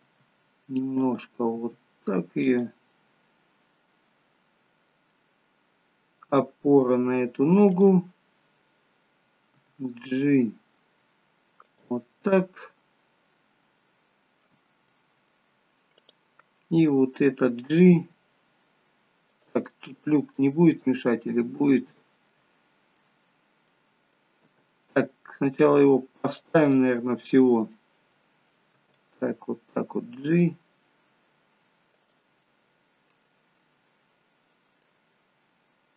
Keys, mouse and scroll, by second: 0.1 r, 1.6 r, 2.9 middle click, 4.6-5.1 scroll down 2, 5.1 middle click, 7.8 click, 9.7 g, 12.2-12.7 scroll down 3, 12.7 middle click, 14.4-14.9 scroll up 3, 14.9 middle click, 16.1 click, 17.7 g, 19.7 middle click, 23.2 middle click, 23.2-23.7 scroll down 1, 23.7 middle click, 24.5 g, 26.8 middle click, 28.8 middle click, 28.8 g, 32.3 middle click, 33.7 middle click, 35.8-35.9 scroll up 2.